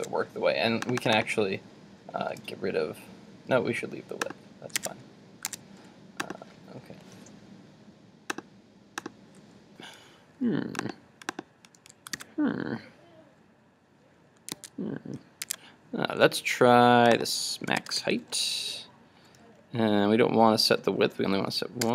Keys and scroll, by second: 0.0 super+Tab, 4.8 super+Tab, 5.6 super+Tab, 12.2 super+r, 14.7 super+Tab.